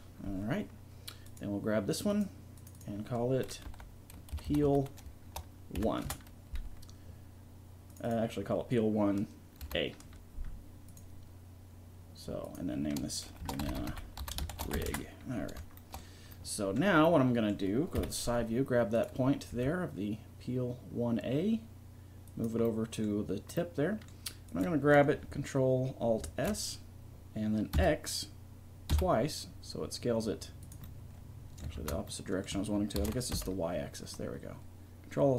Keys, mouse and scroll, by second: 1.3-4.7 drag, 4.5 e, 7.9-10.0 drag, 12.4-15.3 drag, 16.6 middle click, 18.0 KP_3, 19.5 g, 22.7-24.5 drag, 24.5-25.5 right drag, 25.5 click, 26.2 ctrl+alt+s, 30.9 middle click, 31.8 ctrl+z, 33.0 ctrl+alt+s.